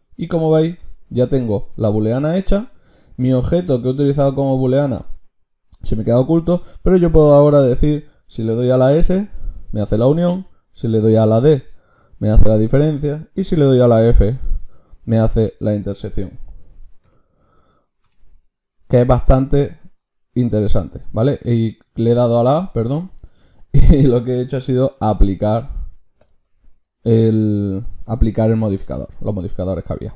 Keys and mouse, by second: 0.0-6.8 drag, 22.1 ctrl+z, 24.8 ctrl+shift+q, 28.3-30.1 drag.